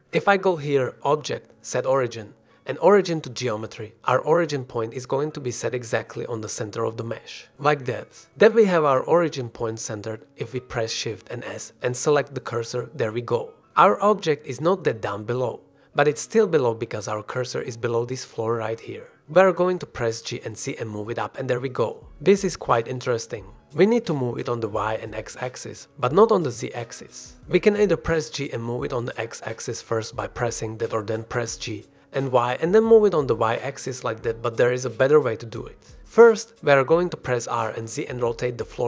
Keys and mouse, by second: 8.6 click, 11.9 shift+s, 13.6 shift+click, 14.1 f, 14.6-16.9 drag, 20.6 g, 20.9 z, 27.0-27.3 drag, 27.3 g, 27.9 x, 32.8 g, 33.4 y, 36.8 r, 37.7 z, 38.7 KP_9.